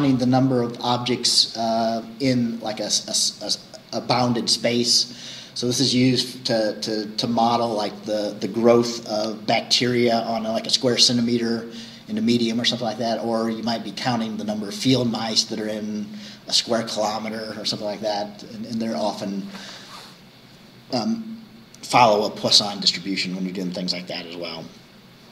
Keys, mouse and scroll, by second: 0.4-4.6 scroll up 1, 4.6-8.9 scroll up 1, 8.9-13.2 scroll up 1, 13.2-17.4 scroll up 1.